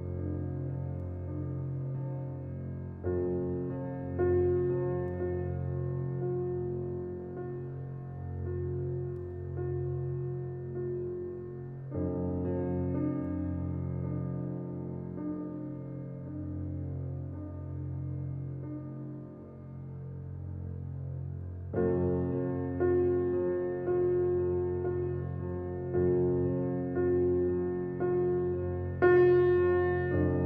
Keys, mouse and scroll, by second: 2.2-3.6 middle drag, 4.2 Tab, 4.8 alt+z, 5.2-5.7 middle drag, 5.7 Tab, 6.1 click, 6.4 shift+click, 7.3 click, 7.8 shift+click, 8.5 alt+middle click, 9.1 shift+click, 9.5 shift+click, 10.3 s, 13.1 middle click, 14.0 alt+click, 15.0 click, 15.4 click, 16.2 alt+click, 16.7 alt+click, 17.8 alt+middle click, 18.6 s, 20.7 Tab, 21.0 click, 22.1 middle click, 22.9 click, 23.2 scroll down 2, 24.0-24.8 drag, 25.2-25.6 middle drag, 25.6 scroll down 2, 25.9-28.6 middle drag, 28.6-28.9 scroll up 1, 28.9-29.8 middle drag, 29.8-30.2 scroll up 1, 30.2 drag.